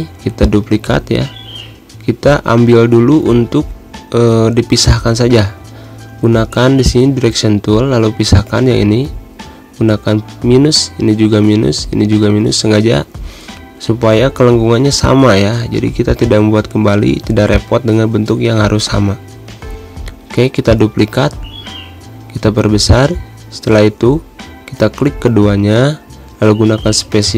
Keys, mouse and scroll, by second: 1.5 shift+d, 2.4 shift+click, 3.3 shift+z, 3.6 shift+click, 4.0 shift+space, 4.2 shift+click, 4.3 shift+space, 5.4 shift+click, 6.8-18.3 shift+drag, 18.4 space, 18.6-23.5 drag, 23.6 space, 23.7 click, 23.9 space, 24.4 click.